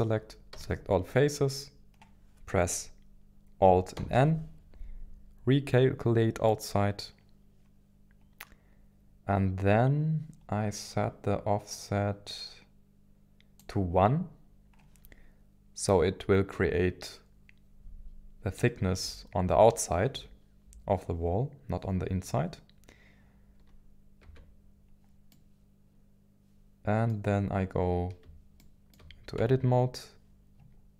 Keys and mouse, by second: 0.5 a, 3.4 a, 4.0 alt+n, 11.8-13.7 drag, 24.2 Tab, 25.3-27.3 middle drag, 28.6-29.4 shift+middle drag, 29.4 Tab.